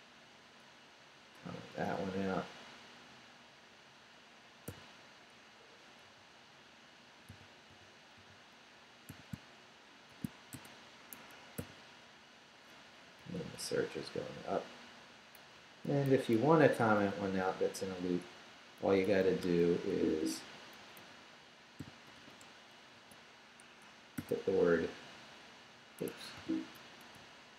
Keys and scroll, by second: 4.7 n, 6.0 n, 7.3 shift+n, 9.1 shift+i, 10.1 shift+3, 10.5 shift+space, 11.1 Escape, 11.6 n, 12.8 Down, 14.6 Up, 15.9 Left, 16.1 Down, 16.3 Left, 17.7 shift+Left, 18.0 shift+3, 18.9 shift+Down, 19.9 Right, 20.3 Up, 20.8 Right, 21.8 i, 22.2 shift+3, 23.0 shift+space, 23.6 Escape, 24.2 p, 26.1 Escape, 26.4-27.5 typing.